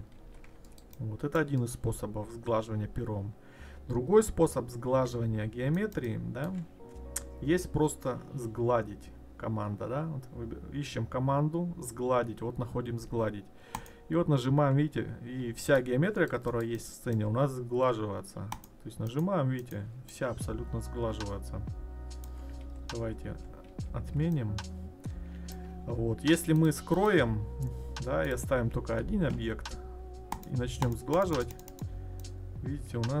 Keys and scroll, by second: 0.2 ctrl+z, 22.6 ctrl+z.